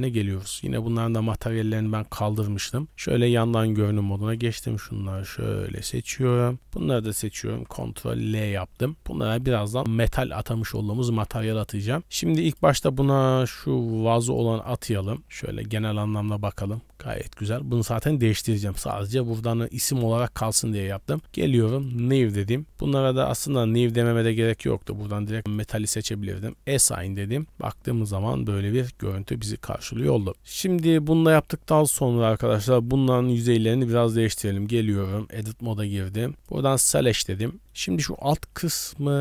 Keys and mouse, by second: 0.3 middle drag, 0.7 Tab, 1.1 shift+middle click, 1.5 middle click, 1.8 a, 2.0 a, 2.6 KP_3, 3.7 z, 4.2 b, 5.4 shift+middle click, 6.2 b, 7.5 ctrl+l, 8.5 middle click, 10.7 middle click, 11.2 z, 12.5-14.4 drag, 15.3 z, 15.8 middle click, 27.3 shift+middle click, 27.5 Tab, 27.7 middle drag, 28.5 middle click, 29.5-29.9 middle drag, 31.2-32.6 middle drag, 33.2 click, 34.3 click, 35.3 Tab, 35.8 click, 36.3 click, 36.9 middle click, 37.6 middle click.